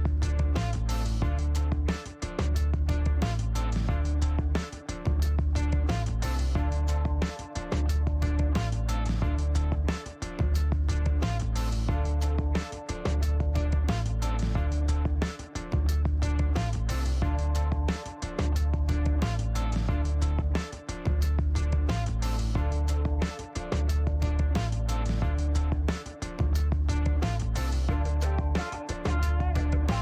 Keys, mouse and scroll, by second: 1.8 click, 3.2 click, 5.8 click, 6.6 click, 7.5 click, 10.9 click, 12.9 click, 14.9 click, 15.7 middle click, 17.4 click, 22.9 click, 23.5 click, 23.9 right click, 28.6 click.